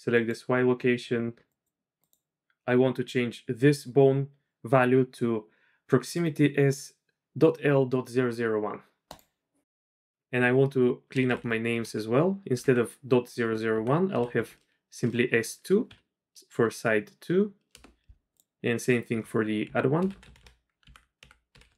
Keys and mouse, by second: 0.1 click, 1.5 click, 2.1 click, 10.1 F2, 11.2 BackSpace, 11.4 BackSpace, 19.0 F2, 20.1 BackSpace, 20.2 BackSpace.